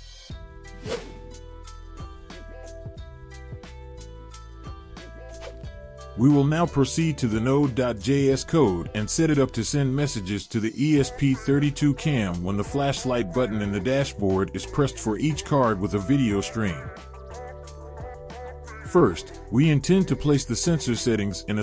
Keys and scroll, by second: 10.3-11.7 typing.